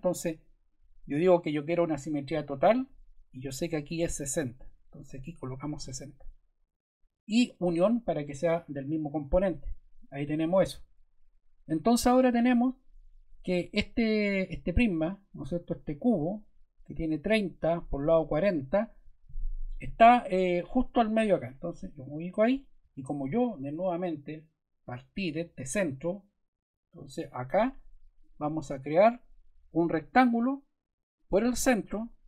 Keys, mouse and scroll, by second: 2.3 click, 4.5 click, 5.3-6.3 typing, 9.3 click, 20.5 click, 21.3 click, 28.2 click, 31.1 click.